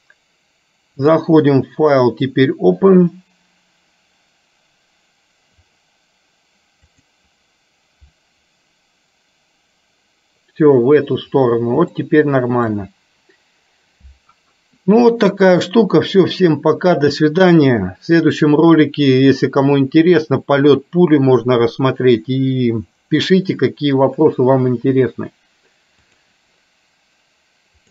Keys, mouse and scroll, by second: 1.1-9.4 drag, 12.1 shift+middle click.